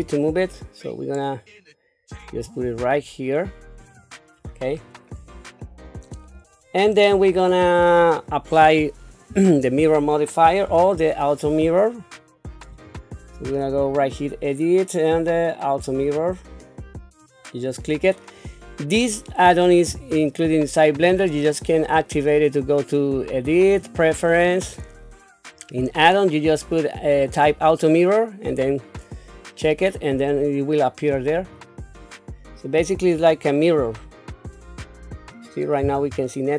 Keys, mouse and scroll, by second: 4.6 scroll up 3, 5.6 shift+middle click, 6.5 scroll down 1, 7.0 shift+middle click, 10.6 n, 12.7 click, 16.0 click, 17.7 click, 23.3-25.0 drag, 33.3 Tab, 35.0-35.8 scroll up 2, 35.8 q.